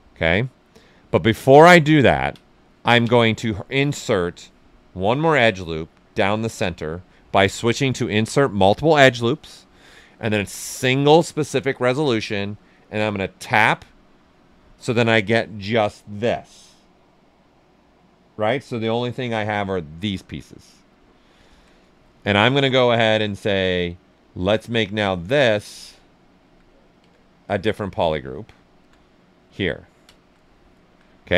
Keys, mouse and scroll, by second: 0.0 right click, 1.1 ctrl+z, 1.9 ctrl+right click, 3.0 space, 6.0 space, 13.1 click, 18.4 click, 24.1 ctrl+shift+click, 24.3-27.8 alt+drag, 27.8 right click, 28.8 alt+click, 29.7 ctrl+right click, 30.3 right click, 30.7 alt+right click.